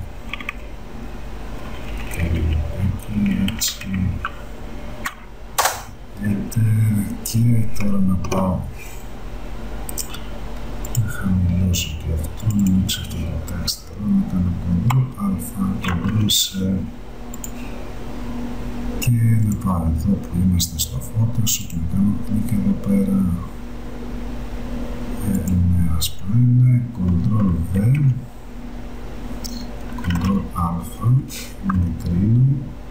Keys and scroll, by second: 1.7 Right, 5.7 Return, 15.0 ctrl+a, 16.1 ctrl+c, 27.9 ctrl+v, 30.3 ctrl+a.